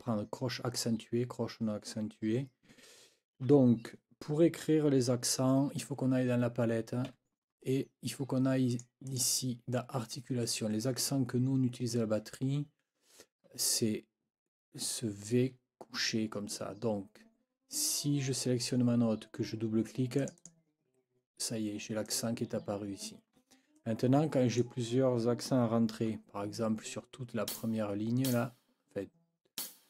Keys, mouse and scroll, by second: 7.1 F9, 8.7 click, 9.1 click, 20.2-20.6 scroll up 1, 22.0 scroll up 1, 23.8-24.5 scroll up 3, 24.6 click, 27.5 ctrl+click, 28.2 ctrl+click, 29.6 ctrl+click.